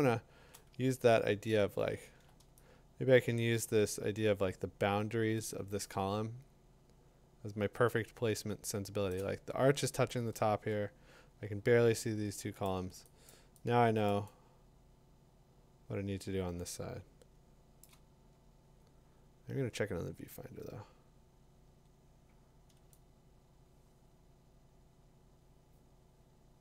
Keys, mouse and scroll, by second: 0.3 click, 0.6 click, 0.8 middle click, 1.1 middle click, 1.4 middle click, 1.5 middle click, 1.9 middle click, 3.4 scroll down 5, 4.2-6.3 scroll, 8.6-9.3 typing, 9.1 click, 12.7 click, 13.3 click, 13.9 click, 14.1 click, 14.4 click, 14.9 click, 16.3-17.1 click, 17.8 click, 18.6 Tab, 22.7-24.7 Tab.